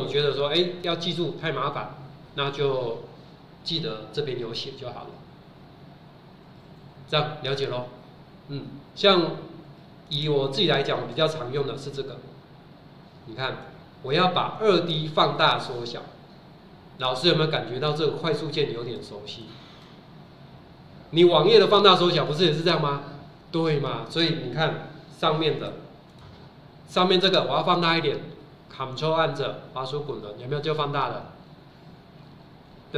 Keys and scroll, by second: 24.8 Escape, 26.2 Escape.